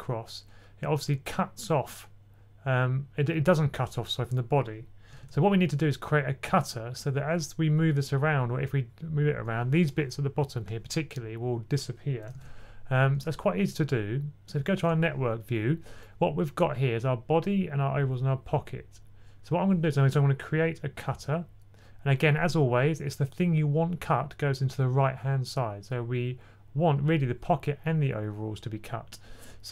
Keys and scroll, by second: 5.1 super+z, 12.2 super+z, 13.0 super+z.